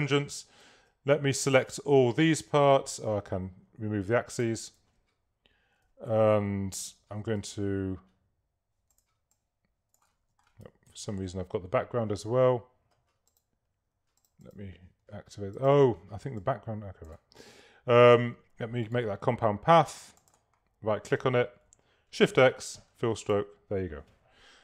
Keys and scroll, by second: 0.8 super+a, 4.9 super+a, 10.2 super+z, 10.9 super+-, 22.3 shift+x.